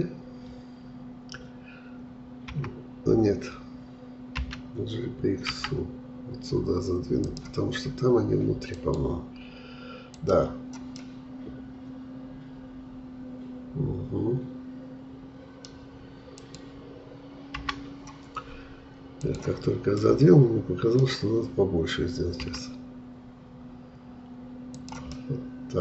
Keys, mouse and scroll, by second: 4.4 g, 11.0-14.0 middle drag, 16.4-17.6 drag, 17.6 Delete, 19.2 click, 20.0-22.4 middle drag, 22.4 s, 25.1-25.8 middle drag.